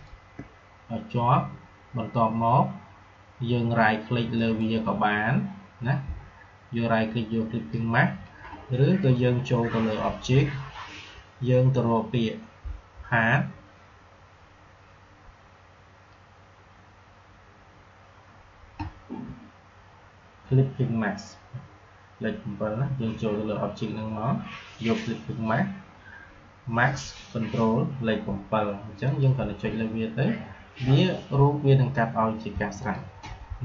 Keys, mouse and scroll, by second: 4.3 right click, 9.0 click, 29.0 click, 32.8 click.